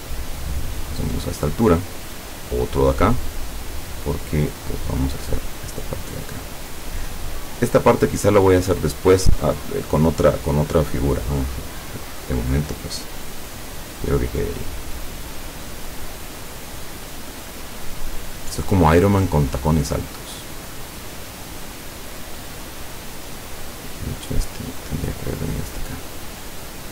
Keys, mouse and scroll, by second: 2.2 click, 4.8-7.3 drag, 13.5-17.6 drag, 18.4-20.5 drag, 24.1-25.9 drag.